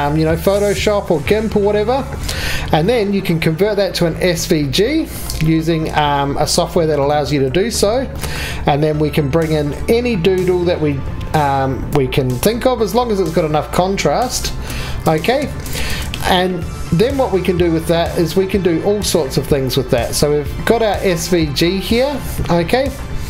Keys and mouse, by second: 11.9 r, 14.8 Escape, 20.0 KP_7.